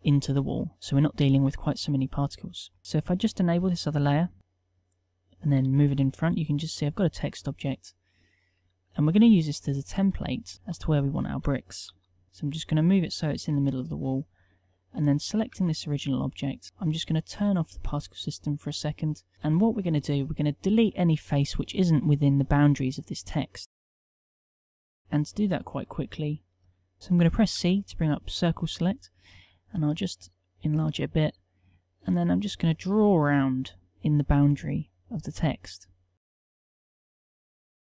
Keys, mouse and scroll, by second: 5.9 g, 9.1 KP_1, 10.7 g, 15.9 Tab, 24.3 z, 27.6 c.